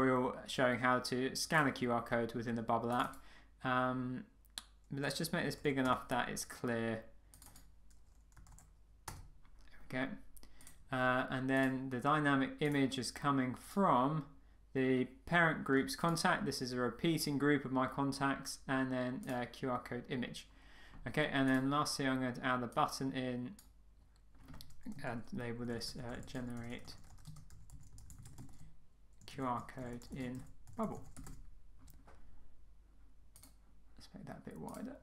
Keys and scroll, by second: 5.8 Return, 9.1 Return, 25.1 a.